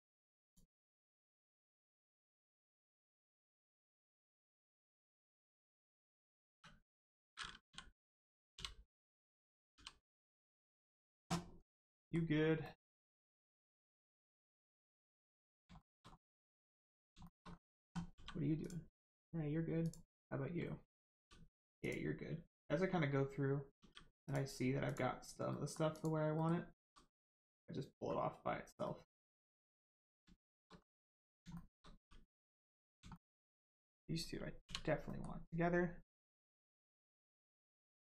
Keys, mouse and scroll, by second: 0.4 click, 1.0 right click, 3.6 click, 6.5 3, 6.8 click, 8.5 u, 9.7 g, 10.4 click, 11.5 scroll down 1, 11.9 middle click, 12.3 scroll up 1, 12.6 middle click, 12.9-13.5 scroll down 1, 13.5 click, 13.9 middle click, 15.0 click, 15.4 middle click, 15.7 shift+middle click, 16.0 scroll up 1, 16.8 middle click, 17.2 shift+middle click, 17.5-17.8 scroll up 1, 18.1 g, 18.6 click, 21.8 click, 23.7 g, 24.2 click, 25.5 middle click, 25.9 click, 26.3 middle click, 26.7 g, 27.3 click, 28.0-28.3 scroll up 1, 28.8 middle click, 29.9 click, 30.3 shift+click, 30.7-31.4 scroll down 1, 31.5 shift+middle click, 31.9 g, 32.4 click, 32.6 scroll up 1, 33.1 shift+middle click, 34.6 u, 35.0 middle click.